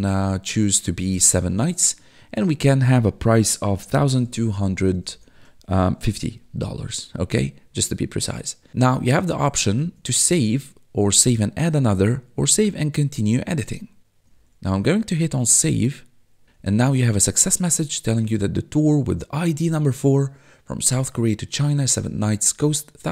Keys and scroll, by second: 3.5-6.5 typing, 9.9 1, 14.4 1, 16.4 1.